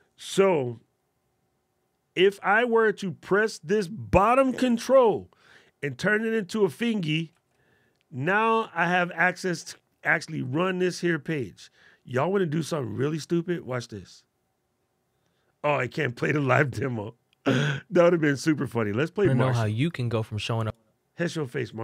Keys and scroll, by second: 4.5 alt+super+8, 7.2 alt+super+8.